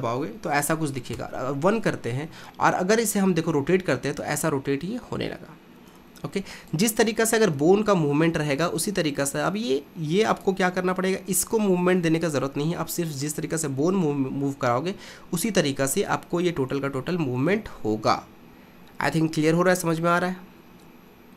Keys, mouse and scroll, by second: 1.1 KP_1, 3.2 r, 7.6 g, 14.3 r.